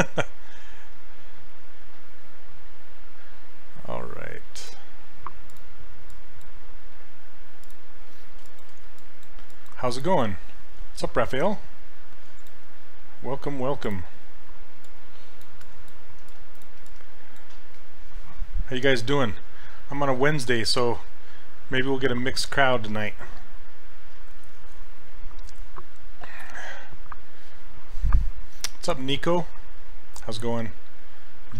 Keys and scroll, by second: 16.9 s.